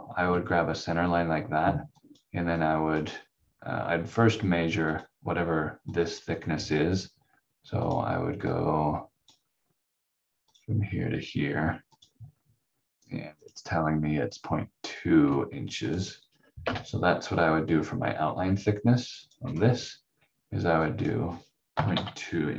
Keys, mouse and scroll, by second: 1.9 click, 16.6 Delete, 17.2-18.3 scroll down 1, 18.3 v, 19.2 click, 19.4 v, 20.8 click, 21.7 KP_Decimal, 21.9 KP_2.